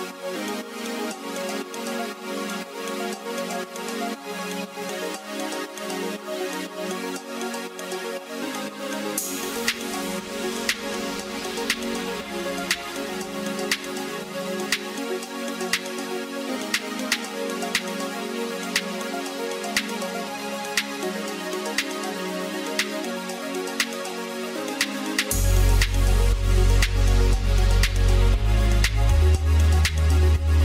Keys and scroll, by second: 6.6 ctrl+z.